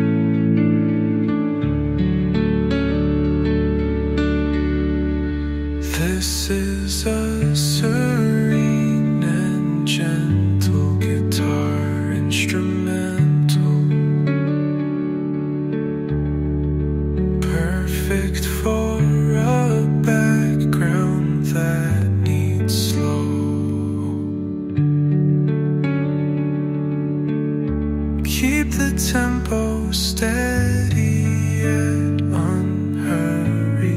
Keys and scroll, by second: 22.0 shift+Page_Down.